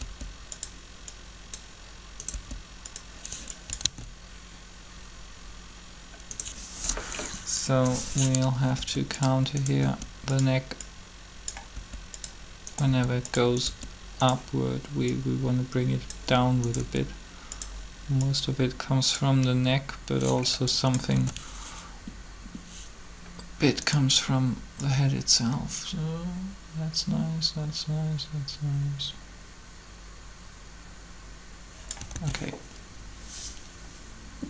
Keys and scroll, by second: 0.0 r, 2.3 r, 3.8 alt+a, 8.8 r, 9.8 r, 11.7 r, 12.8 r, 16.8 r, 21.1 alt+a, 32.1 alt+a.